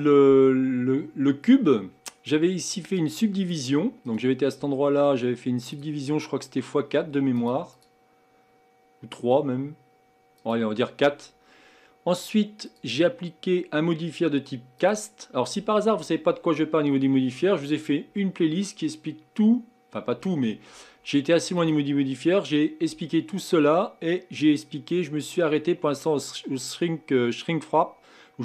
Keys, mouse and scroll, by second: 3.0-7.2 drag, 7.4-16.0 drag, 21.6-24.7 drag.